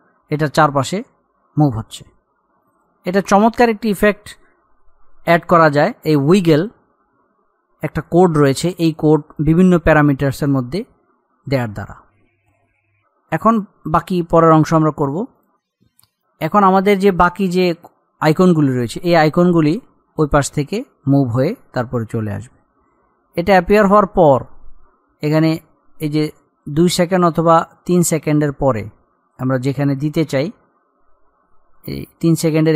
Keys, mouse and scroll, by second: 12.7 click, 19.9-20.2 scroll up 1, 22.5-29.8 drag, 31.8 Page_Up.